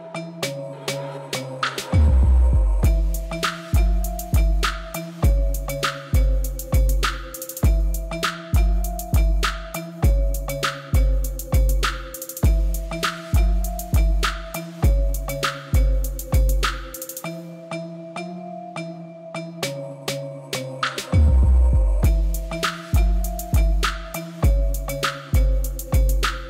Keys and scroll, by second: 1.1 Tab, 3.7 Tab, 6.4 g, 7.8 x, 13.6 Tab.